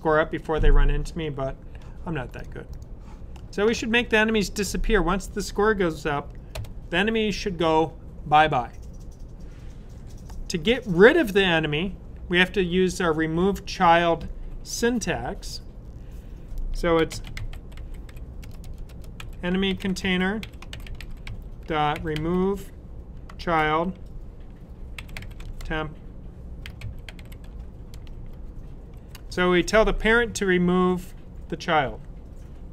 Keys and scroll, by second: 16.6-23.3 typing, 24.6-28.8 typing.